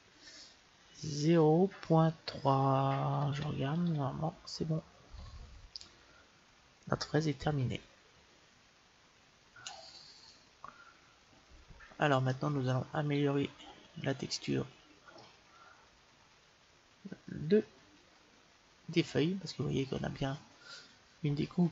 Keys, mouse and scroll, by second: 9.1-13.5 middle drag, 14.1-15.7 middle drag, 16.2-16.6 scroll up 1, 16.6-18.1 middle drag.